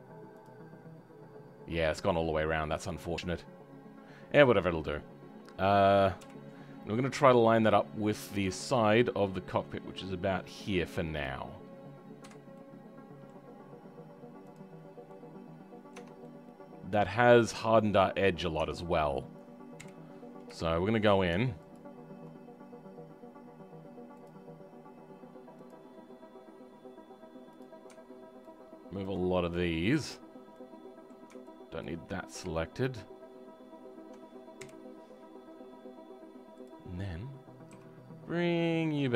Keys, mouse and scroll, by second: 6.2 KP_7, 7.5-12.2 drag, 12.2 w, 12.5-14.4 middle drag, 14.4 click, 14.8 scroll up 3, 15.0 middle click, 15.9 Tab, 16.2-18.5 middle drag, 18.5 Tab, 19.7 KP_1, 20.2-20.6 scroll up 4, 20.6-21.7 shift+middle drag, 21.7 alt+click, 29.0 ctrl+click, 29.2 scroll down 2, 29.5 right click, 29.5 middle click, 30.1-30.5 scroll down 2, 30.5-31.8 right drag, 30.5 middle click, 31.8 ctrl+click, 35.1-36.5 scroll up 10, 36.5-37.7 drag, 37.7 g.